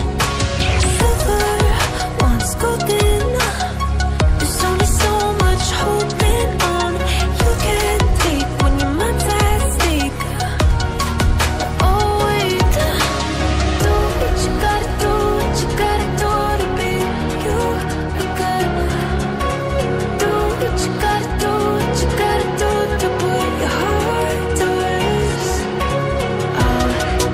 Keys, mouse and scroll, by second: 0.1 double click, 0.4 click, 1.5-2.0 scroll up 1, 2.0 click, 4.4 Up, 4.5 Up, 4.8 Up, 7.3 click, 7.8-8.8 scroll up 1, 8.8 click, 12.7 click, 15.9 ctrl+c, 16.1 ctrl+v, 16.7 click, 18.3 ctrl+c, 18.5 ctrl+v, 19.3 click, 20.6 click, 24.8-26.7 scroll down 1.